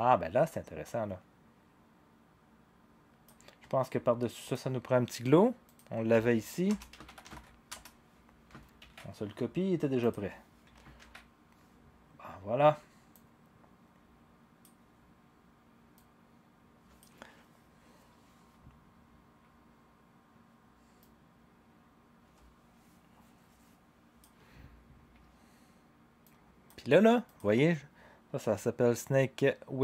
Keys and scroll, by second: 6.6-7.8 typing, 8.8 ctrl+c, 11.0 ctrl+v.